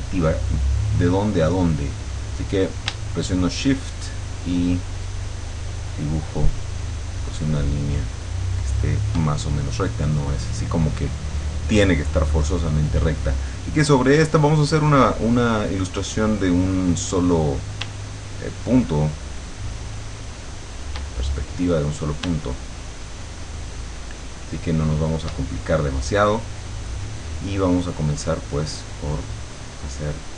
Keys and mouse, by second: 3.4-9.1 shift+drag, 18.7-21.1 shift+drag, 22.8-25.5 shift+drag.